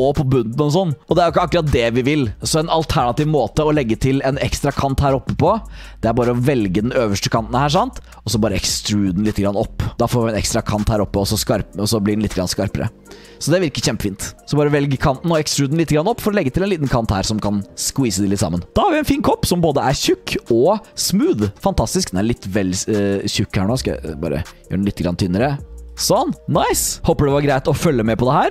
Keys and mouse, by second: 1.7 ctrl+z, 3.7 click, 6.4 alt+click, 8.4 e, 11.3 click, 12.7 click, 13.3 Tab, 13.8-14.4 drag, 14.9 click, 15.4 Tab, 16.1 shift+middle click, 18.7 Tab, 18.7 click, 20.5 drag, 21.6-21.9 drag, 23.4-25.8 drag, 26.2 click.